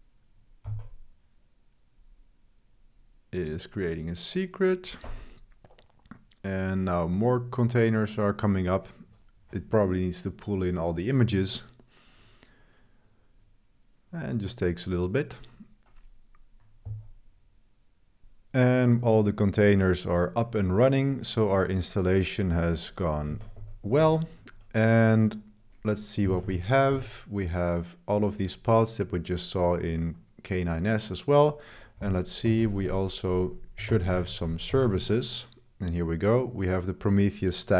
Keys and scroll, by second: 0.6 l, 5.1 Escape, 23.0-24.0 typing, 26.0-26.9 typing, 32.0-35.5 typing.